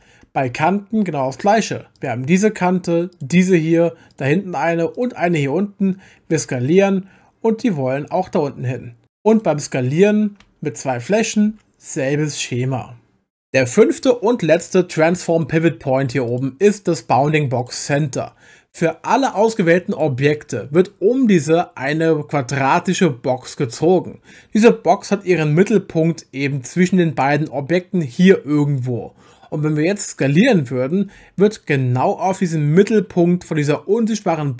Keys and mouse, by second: 0.5 2, 2.0 click, 3.1 shift+click, 4.1 shift+click, 5.0 shift+click, 6.3 s, 9.0 Escape, 9.0 3, 9.3 click, 10.8 shift+click, 11.5 s, 16.3-17.7 drag, 19.2 click, 31.1 s.